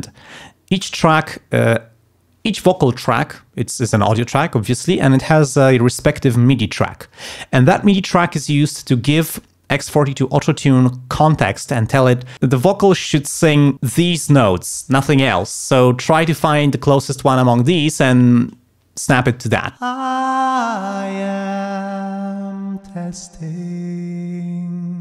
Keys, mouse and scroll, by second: 19.8 space.